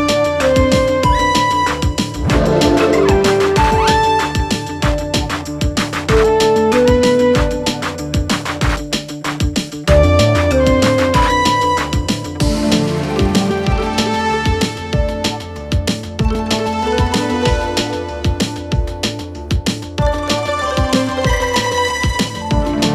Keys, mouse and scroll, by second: 0.7 click, 1.6 right click, 3.4 click, 3.6 ctrl+z, 4.1 click, 6.0 super+d, 6.7-7.1 click, 7.0-8.4 alt+Tab, 9.7-11.2 drag, 11.4-11.7 alt+scroll down 1, 12.4-14.1 drag, 14.3-15.3 drag, 17.4-18.1 click, 18.9 alt+click, 20.0 ctrl+s, 22.3 ctrl+F4.